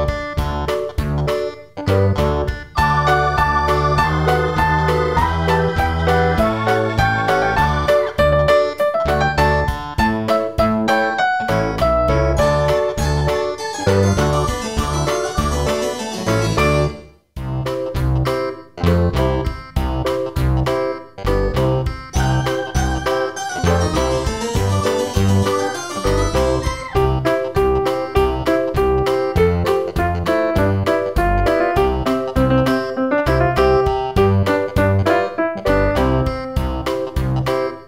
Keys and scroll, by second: 15.8 super+v, 25.1 super+z.